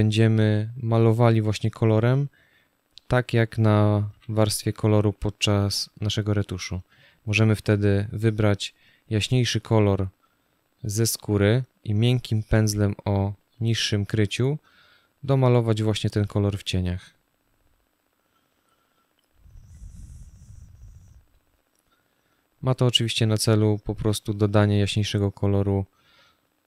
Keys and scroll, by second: 3.8 b.